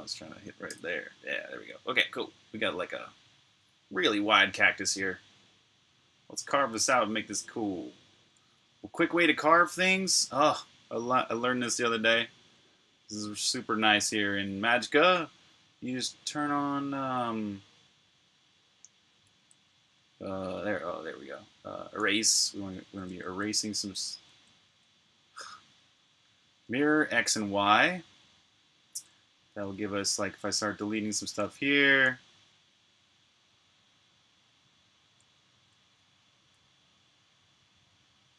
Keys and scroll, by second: 0.6 BackSpace, 19.0-19.8 typing, 22.1-24.6 typing, 31.6-32.4 typing, 35.0-35.8 typing.